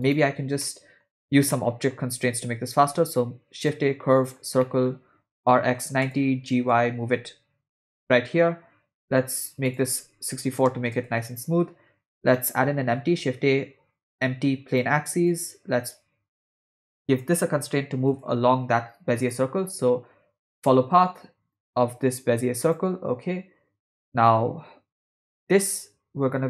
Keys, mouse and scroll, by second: 0.7-1.0 middle drag, 1.6-1.9 ctrl+middle drag, 2.4 shift+a, 4.6-4.9 middle drag, 5.4 r, 6.5 g, 9.7-11.0 drag, 12.4 middle click, 12.7 shift+a, 17.3 click, 18.1 click, 19.2-20.9 drag, 21.5 click, 25.3 click.